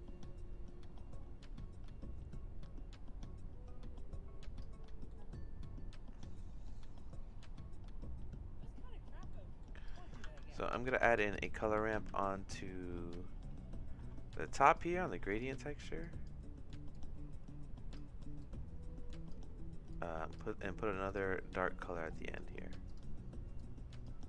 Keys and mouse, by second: 5.1 middle click, 9.4 middle click, 9.9 click, 10.3 shift+d, 11.7 x, 12.1 shift+a, 16.0 click, 16.9-17.9 drag, 18.4 click, 19.9 click, 21.1 click, 22.2 click, 22.8 click.